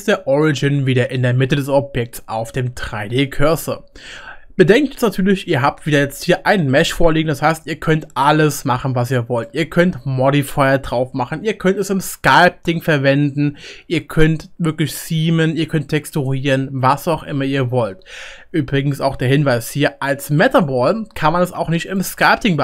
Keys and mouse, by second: 2.5-9.8 middle drag, 9.3 click, 9.3 right click, 9.8-22.6 right drag.